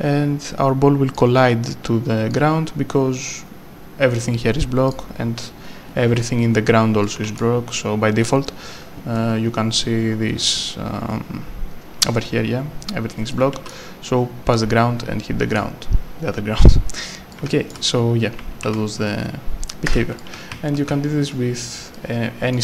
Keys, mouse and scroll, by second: 1.1 click, 5.7 scroll up 1, 7.0 right click, 7.1 s, 8.7 scroll, 10.2 scroll up 1, 10.3 scroll down 1, 12.2 scroll down 1, 13.3 right click, 15.5 click, 17.3 right click, 18.2 w, 18.6 s, 19.9 Escape, 20.2 right click, 20.3-21.8 typing, 21.9 click.